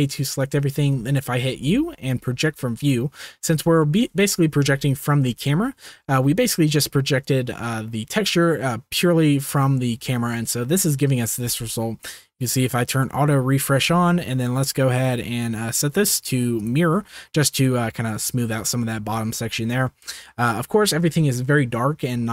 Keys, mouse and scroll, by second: 1.5 u, 3.8 shift+middle click, 4.7 Tab, 5.6 shift+middle drag, 12.8 click, 15.7-16.6 drag, 18.8-19.4 shift+middle drag, 19.8 click.